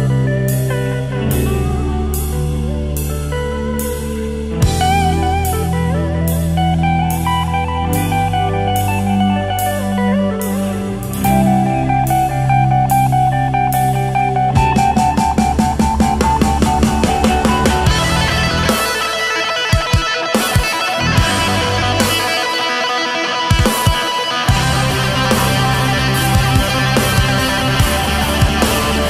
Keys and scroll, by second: 0.8 ctrl+z, 1.9 ctrl+z, 4.1 space, 6.7 space, 7.6 ctrl+z, 10.5 space, 12.5 ctrl+z, 16.7 ctrl+z, 19.1 ctrl+z, 20.6 ctrl+z, 22.2 ctrl+z, 22.8 space, 23.1 space, 23.2 ctrl+z, 24.2 ctrl+z, 24.7 ctrl+z, 26.1 space, 26.4 space, 26.9 ctrl+z.